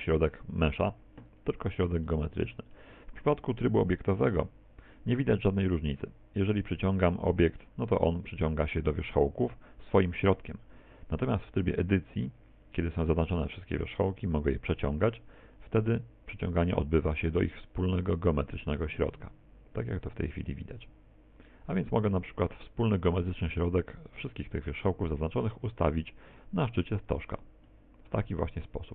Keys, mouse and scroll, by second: 0.7 right click, 2.1 middle click, 3.3 middle click, 5.4 g, 12.1 Tab, 27.2 ctrl+click, 27.7 middle click.